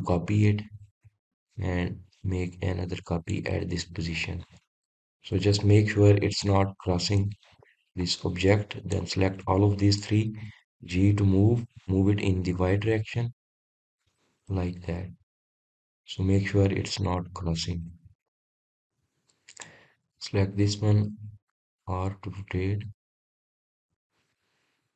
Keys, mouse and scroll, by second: 0.9 shift+d, 4.7 click, 5.3-5.7 scroll down 1, 5.7-6.6 middle drag, 6.6-7.4 scroll up 2, 7.4 click, 8.3 shift+drag, 8.7-10.0 middle drag, 10.0 shift+click, 10.6-12.0 middle drag, 12.0 g, 15.5 drag, 16.0-16.4 scroll down 2, 16.4-19.0 middle drag, 19.0-20.0 scroll up 1, 20.0 drag.